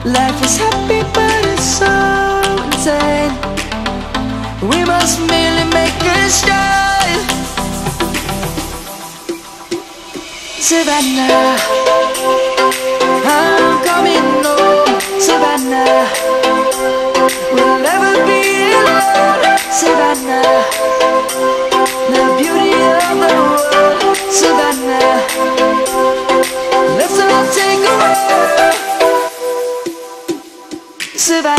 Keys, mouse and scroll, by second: 8.3-8.7 shift+drag, 11.6 shift+Down, 13.7-14.1 click, 14.7 shift+Up, 15.7 click, 16.3 ctrl+=, 16.7 space, 16.9 click, 17.1-17.5 space, 18.0 click, 19.1-20.0 alt+shift+drag, 20.2 click, 21.0 ctrl+-, 21.7 space, 22.0 click, 22.1-22.4 space, 22.7 ctrl+-, 23.0-23.6 space, 23.6 drag, 28.9 ctrl+z, 29.3 click, 30.1 space, 30.3 click, 30.4 space, 30.8-31.5 drag.